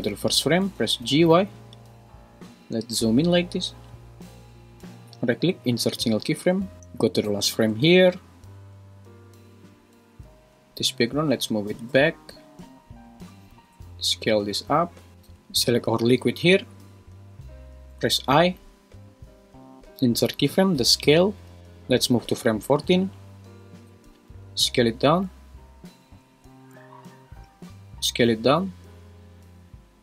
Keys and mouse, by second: 0.7 g, 1.0 y, 5.5 right click, 7.3 shift+Right, 11.6 g, 11.9 y, 13.5 s, 15.2 g, 16.1 Escape, 17.9 i, 22.5 click, 24.4 s, 26.2 Escape, 28.0 s.